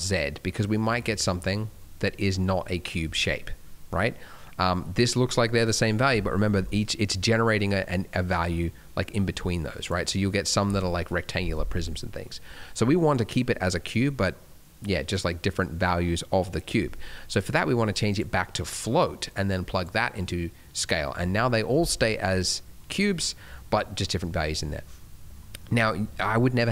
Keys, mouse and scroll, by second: 0.6 scroll down 1, 0.9 middle click, 1.2-1.5 scroll up 2, 1.5 middle click, 8.3 click, 11.9 middle click, 12.4-14.8 scroll down 1, 17.3 click, 18.4 middle click, 19.2 click, 20.1 middle click, 21.0 scroll up 2, 21.4 middle click, 21.7 scroll down 1, 21.9 middle click, 23.4 middle click, 23.7 middle click, 24.9-25.6 scroll up 2, 25.0 middle click, 25.6 middle click.